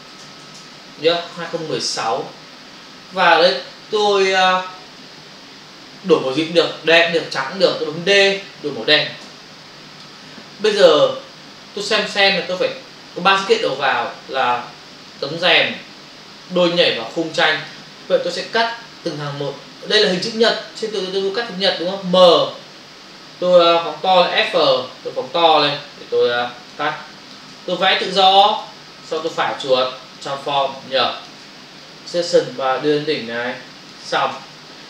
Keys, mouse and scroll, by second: 0.5-1.9 typing, 2.2 Return, 9.3 alt+BackSpace, 13.7 click, 16.4 click, 17.0 click, 17.6 double click, 18.7 ctrl+space, 18.8 ctrl+click, 18.9 ctrl+space, 25.9 space, 26.8 ctrl+click, 28.0 click, 29.2 right click, 30.1 click, 30.7 ctrl+click, 32.2 click, 34.4 ctrl+o.